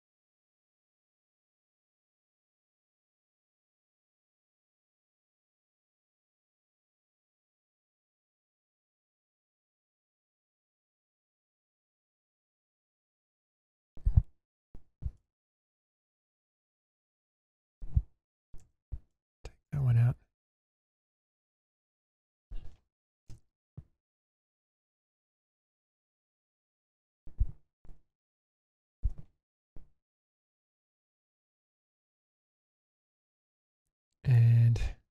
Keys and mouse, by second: 4.0 click, 6.8-12.2 middle drag, 13.4 shift+middle click, 14.8 2, 15.5 click, 16.2 shift+middle drag, 18.6 ctrl+x, 19.2-22.4 middle drag, 23.3 k, 27.9 1, 28.1 click, 28.6 shift+click, 30.5 m, 32.3 middle click, 32.7 click, 33.0-34.3 middle drag.